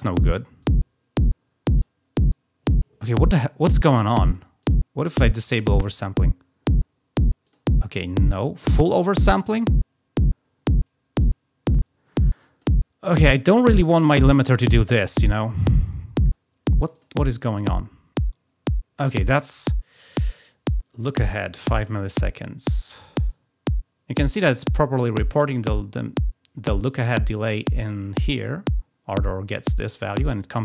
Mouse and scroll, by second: 0.5-1.8 drag, 2.2-2.7 drag, 4.2 click, 4.6 click, 5.7 click, 7.4 click, 8.7 click, 11.2-12.6 drag, 13.4-16.2 drag, 16.8 click, 17.0 click, 20.7 click, 23.2-24.1 drag.